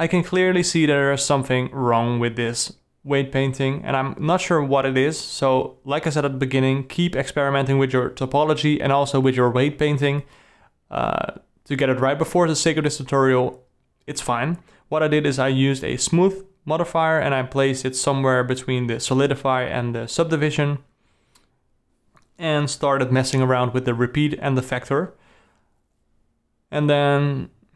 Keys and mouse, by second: 0.9 click, 1.7-4.0 drag, 6.2-9.5 drag, 10.7-14.0 drag, 17.2-18.2 drag, 19.6-21.9 drag, 22.2-23.8 drag, 24.9 click, 25.8 r, 27.5 click.